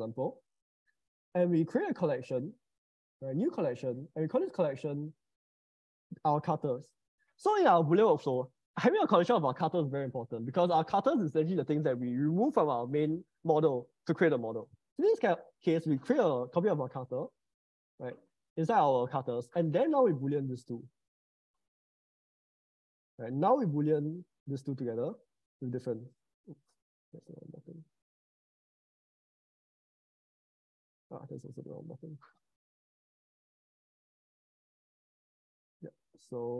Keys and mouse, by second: 2.2-3.3 right drag, 5.7-8.3 drag, 6.6 t, 16.5 ctrl+c, 16.9 ctrl+v, 19.9 click, 22.9 middle click, 23.5 click, 24.9 ctrl+shift+b, 26.5 ctrl+z, 29.7 ctrl+shift+b, 30.9 ctrl+z, 31.3 click, 32.1 middle click, 33.6 ctrl+shift+b.